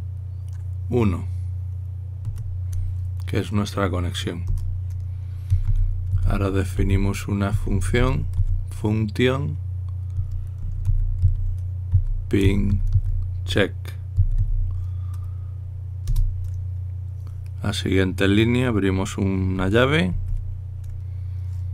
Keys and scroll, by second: 3.0 1, 5.2-9.6 typing, 11.2-15.6 typing, 16.8 typing, 20.7-21.4 typing.